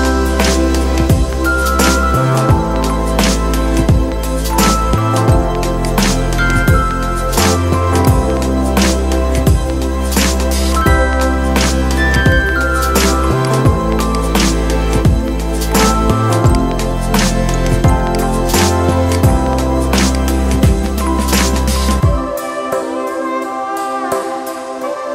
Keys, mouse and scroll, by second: 7.8-9.9 drag, 9.9 ctrl+g, 11.9-16.3 drag.